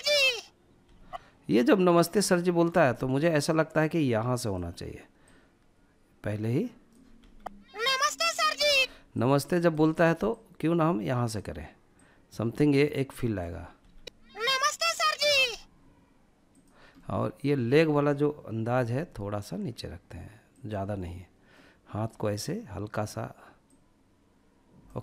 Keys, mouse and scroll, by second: 1.1-2.9 drag, 4.2-6.2 drag, 6.2 space, 7.6 space, 8.1-10.6 drag, 10.9-12.8 drag, 12.8 space, 14.4 space, 15.4-15.9 drag, 15.9-17.4 middle drag, 17.7 g, 19.6 click, 19.9 middle click, 22.7-25.0 drag.